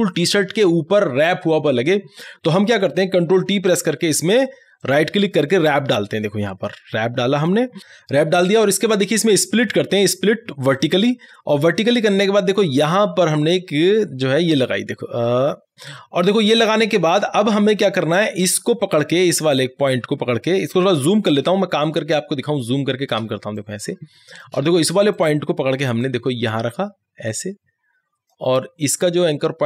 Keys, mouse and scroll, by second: 4.0 ctrl+t, 4.9 right click, 7.4 click, 9.0 click, 9.0 right click, 10.8 click, 15.4 click, 18.7 click, 21.5 ctrl+=, 23.2 space, 23.6 click, 23.8 space, 25.2-29.6 drag.